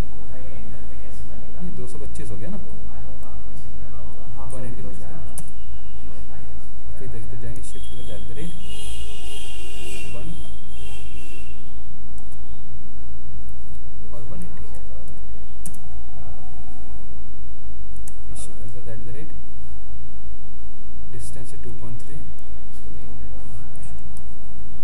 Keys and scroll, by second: 8.1 ctrl+shift+?, 10.5 ctrl+?, 18.3 ctrl+shift+z, 22.0 ctrl+œ, 22.3 ctrl+z, 23.8 ctrl+shift+z.